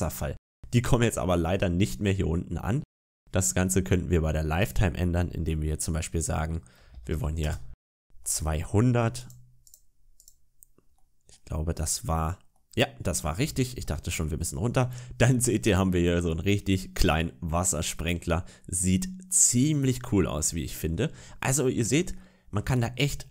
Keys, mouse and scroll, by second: 0.1 shift+middle click, 0.5 middle click, 3.2-3.6 scroll up 5, 4.4 click, 7.0 0, 8.1 middle click, 9.0 click, 9.5 click, 10.0 click, 10.8 middle click, 11.7 middle click, 12.4 middle click, 12.9-13.3 scroll down 2, 13.3 shift+middle click, 14.1 middle click, 15.1 middle click, 21.1-21.6 scroll up 2, 21.6-22.0 scroll down 2, 22.0 shift+middle click, 23.1 middle click.